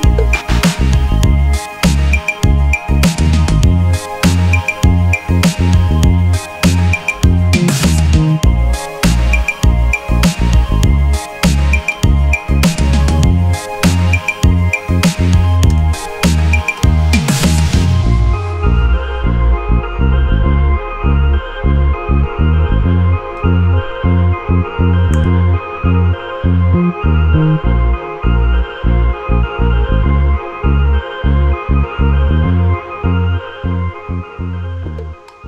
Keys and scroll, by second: 7.2 space, 12.1 space, 12.6-16.5 space, 16.6 space, 16.7 space.